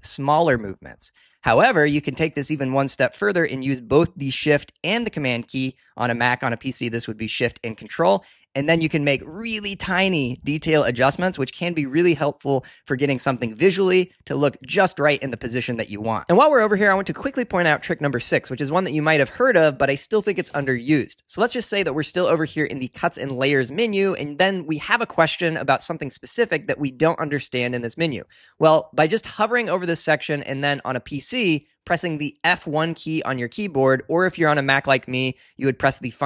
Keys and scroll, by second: 0.5 super+Up, 1.4 super+Down, 8.7 shift+super+Up, 10.8 shift+super+Down.